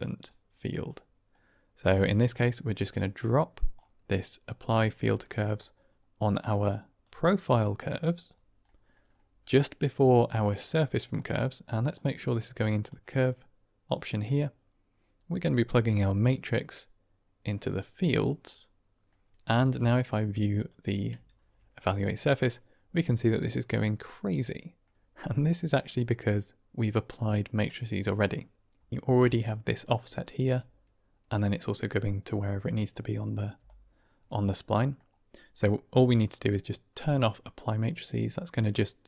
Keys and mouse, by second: 1.3 click, 2.3 click, 3.2 click, 4.7 middle click, 5.3 middle click, 6.1 click, 8.5 middle click, 10.6 middle click, 11.8-12.8 drag, 13.9 middle click, 15.7-17.7 drag, 18.3 middle click, 20.4 ctrl+shift+click, 21.8 click, 21.9-24.7 middle drag, 25.5 middle click, 27.5 click, 29.0 d, 29.1-30.4 drag, 29.9 d, 30.4 d, 33.5 d, 33.6 click, 34.6 middle click.